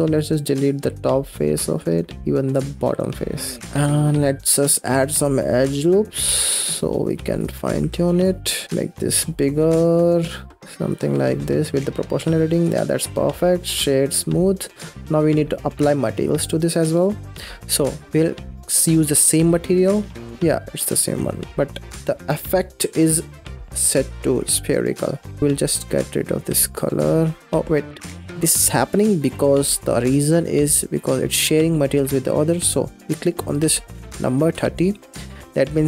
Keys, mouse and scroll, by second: 0.2 middle click, 0.7 x, 1.8 middle click, 2.3 click, 2.8 x, 3.3 Tab, 3.7 middle click, 4.3-4.7 scroll up 1, 4.7 ctrl+r, 7.6 2, 8.0 alt+click, 8.6 s, 11.0-12.6 middle drag, 12.6 Tab, 13.5 right click, 14.4 scroll down 2, 14.8 middle click, 15.4-15.9 scroll up 2, 15.9-17.3 middle drag, 20.3-20.9 middle drag, 20.9 scroll up 1, 21.2 scroll down 2, 21.5-22.7 middle drag, 22.7-23.1 scroll up 4, 23.1 scroll down 2, 23.5-25.4 middle drag, 25.4 click, 26.5 x, 26.7-27.3 middle drag, 27.3 click, 27.4 middle drag, 27.7 ctrl+z, 27.9 ctrl+z, 28.2 ctrl+z, 28.2 ctrl+z, 28.8-29.1 scroll down 4, 29.1 middle click, 29.6 click, 30.0 ctrl+s, 34.6-35.6 drag, 35.6-35.8 middle drag.